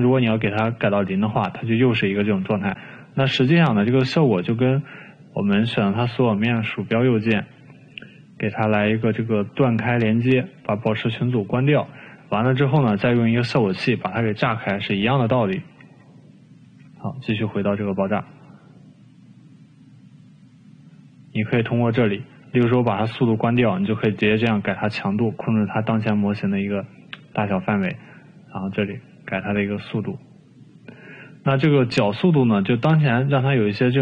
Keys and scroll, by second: 6.7 ctrl+a, 16.7 ctrl+z, 17.5 ctrl+z.